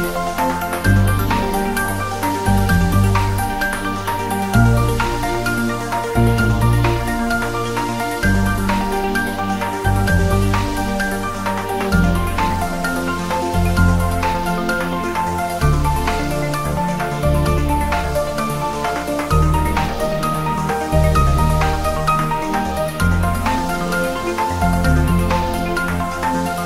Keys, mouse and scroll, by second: 0.4 scroll down 1, 0.6-1.9 typing, 1.0 click, 1.6 click, 2.7 Return, 3.2 click, 4.0 Return, 4.4-4.9 scroll up 1, 6.8-7.3 scroll down 1, 7.3 click, 7.5-7.8 scroll down 1, 8.0 shift+d, 8.7-9.5 drag, 10.4 scroll down 1, 10.7 g, 11.3-12.2 click, 12.3 scroll up 1, 14.2 scroll down 1, 14.8-15.3 click, 15.4 scroll up 1, 19.0-19.4 scroll down 1, 19.8 click, 20.1 scroll down 1, 20.6 click, 20.9-22.0 typing, 21.8 click, 22.7 click, 23.6 r, 24.2 click, 24.4 g, 25.1 click, 25.6 shift+d, 25.9 r.